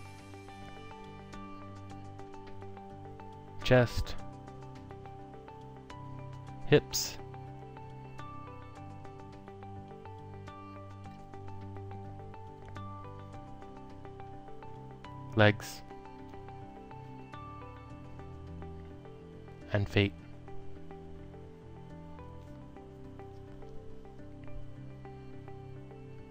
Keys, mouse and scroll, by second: 0.6 click, 1.1 alt+click, 2.4 click, 3.9 ctrl+click, 7.0 ctrl+click, 8.1 click, 10.1 click, 10.9 ctrl+click, 12.6 alt+middle click, 13.9 click, 14.6 ctrl+click, 17.1 ctrl+click, 18.9 click, 19.6 ctrl+click, 21.1 click, 21.9 ctrl+click, 23.6 click, 25.2 ctrl+click.